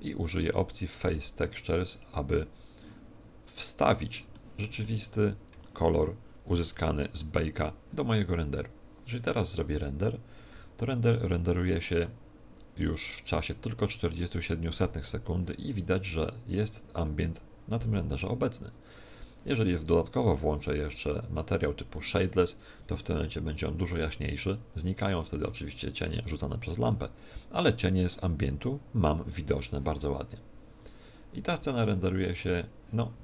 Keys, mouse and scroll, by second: 1.4 click, 3.5-4.2 scroll down 5, 4.3 shift+middle click, 5.2-5.6 scroll down 2, 5.6 shift+middle click, 6.1-6.6 scroll down 4, 6.8 shift+middle click.